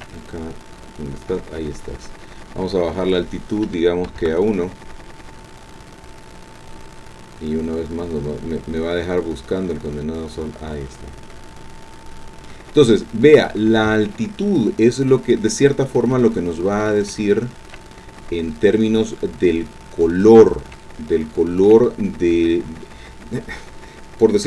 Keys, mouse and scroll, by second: 3.0 click, 4.1 KP_1, 4.2 KP_Enter, 5.2-12.7 drag, 12.7 scroll down 1, 12.7 click, 14.2-15.3 drag, 15.4-16.1 scroll up 1, 16.1 shift+click, 17.2 shift+click, 18.2-20.1 drag, 20.1 scroll up 2, 20.2-20.6 scroll down 2, 20.8-21.9 shift+drag.